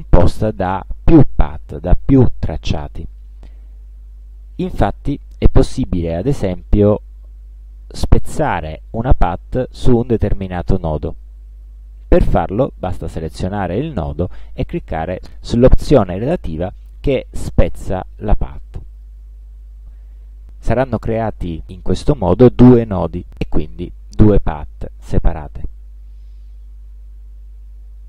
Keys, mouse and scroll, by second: 7.9 click, 19.1 click, 21.2 click, 22.6 click, 23.9 click.